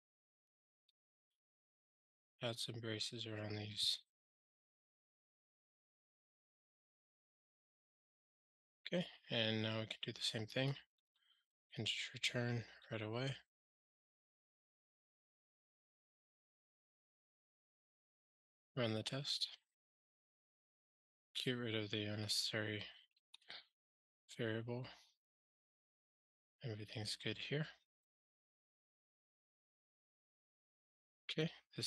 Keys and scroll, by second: 6.1 alt+super+l, 11.0 ctrl+g, 16.7 super+BackSpace, 17.7 ctrl+alt+shift+r, 23.0 super+BackSpace, 23.1 ctrl+alt+shift+r.